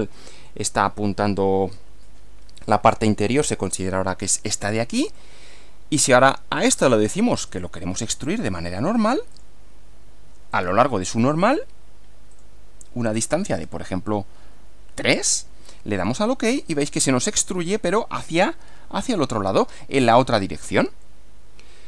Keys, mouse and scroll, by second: 5.2-6.3 middle drag, 6.6 click, 7.5 click, 9.3 click, 10.5 click, 12.3 click, 13.2 click, 13.7 scroll up 1, 14.9 scroll up 1, 15.9 click, 16.9-17.7 middle drag, 21.0-21.8 middle drag.